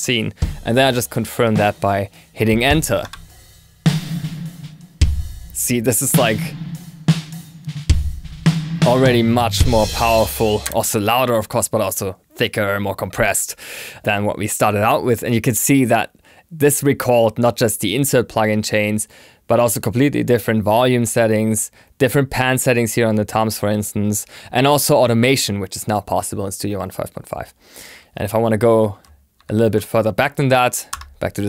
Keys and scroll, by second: 2.9 Return, 29.3 ctrl+super+s, 30.8 Return.